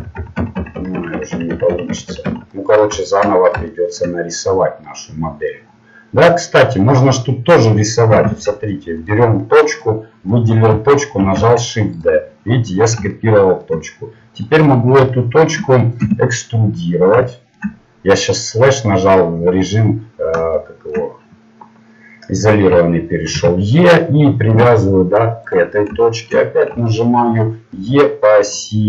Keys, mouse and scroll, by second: 0.1 ctrl+z, 0.4 ctrl+z, 0.5 ctrl+z, 0.8 ctrl+z, 0.9 ctrl+z, 1.1-1.9 ctrl+z, 2.1 ctrl+z, 2.2 ctrl+z, 6.2-9.1 middle drag, 9.1 ctrl+Tab, 9.7 right click, 11.2 shift+d, 16.0 KP_Divide, 18.4-23.2 middle drag, 23.3 e, 26.3-28.8 middle drag.